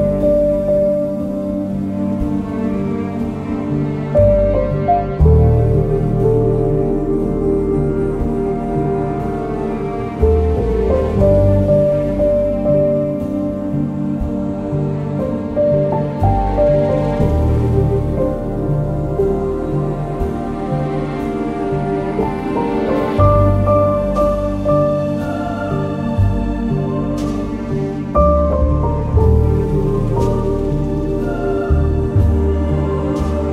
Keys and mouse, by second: 0.1 g, 0.2 y, 2.3 click, 4.1 shift+click, 7.5 shift+click, 13.4 ctrl+b, 15.0 shift+middle click, 17.1 ctrl+r, 18.2 click, 18.8 ctrl+r, 19.1 click, 20.4 ctrl+r, 21.1 Escape, 22.0 Tab, 23.1 Tab, 25.3 ctrl+KP_1, 26.1 1, 26.6 alt+z, 27.8 g, 28.7 click, 30.5 g, 31.9 Escape, 32.7 alt+z.